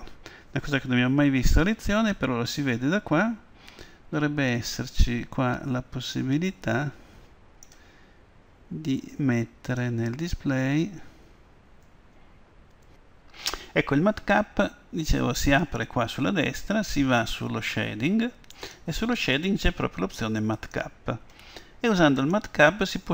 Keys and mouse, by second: 2.2-4.1 drag, 9.7-11.6 drag, 15.7-23.1 drag.